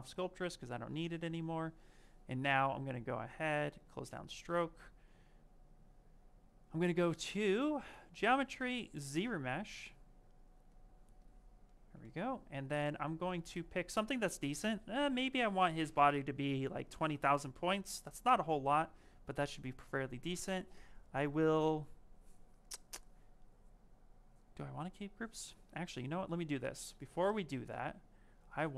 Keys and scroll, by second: 0.8 shift+f.